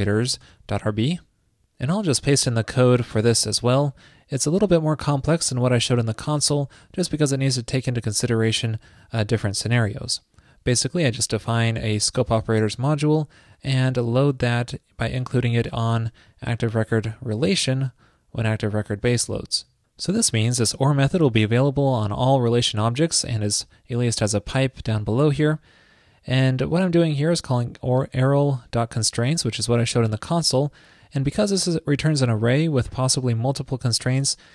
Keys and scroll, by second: 3.3 super+v, 19.6 super+Up, 19.6 super+s.